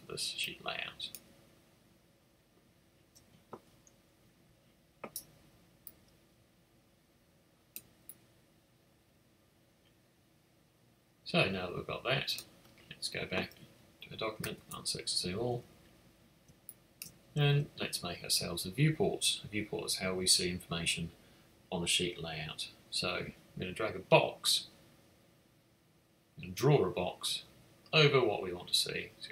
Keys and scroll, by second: 14.4 super+6, 16.4 space.